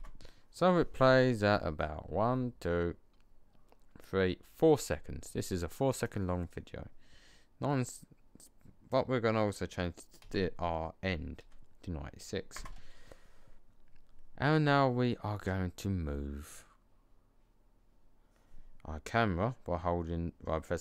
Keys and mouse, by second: 5.8-7.8 drag, 8.4 click.